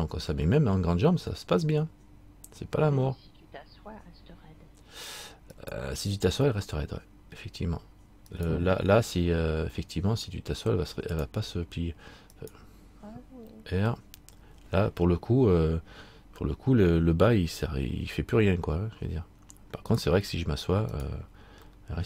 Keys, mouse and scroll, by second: 6.9 middle click, 8.5 right click, 11.3 click, 12.6 right click, 14.0 r, 21.2 right click, 21.9 middle click.